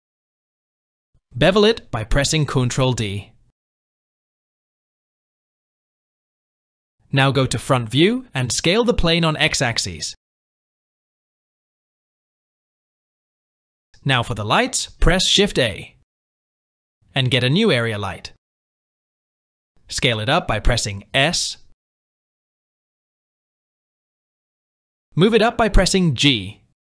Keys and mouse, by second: 1.9 click, 3.3 ctrl+b, 8.1 KP_1, 8.6 Tab, 9.8 s, 10.9-11.6 drag, 13.6 shift+c, 14.4 KP_1, 15.9 shift+c, 16.6 shift+a, 20.9 s, 25.1 g.